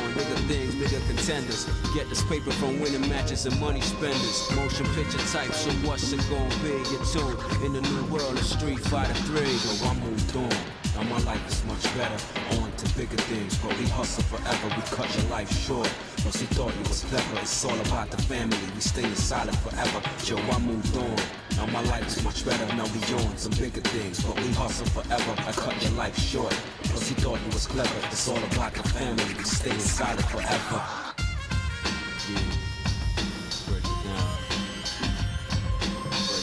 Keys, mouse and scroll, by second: 0.8 x, 2.3 ctrl+Tab, 4.0 click, 5.2 ctrl+Tab, 7.7 click, 8.5 shift+middle click, 10.5 shift+click, 11.7 middle click, 13.2 g, 15.0 middle click, 16.3 shift+middle click, 18.9 scroll up 2, 19.3 scroll down 1, 20.2 shift+middle click, 20.9 shift+middle click, 21.4-21.8 scroll down 2, 21.8 scroll up 1, 22.5 shift+middle click, 23.5 click, 24.8 click, 25.2 middle click, 26.6 shift+click, 27.3 shift+middle click, 28.6 g, 31.2 scroll down 1, 32.8 z.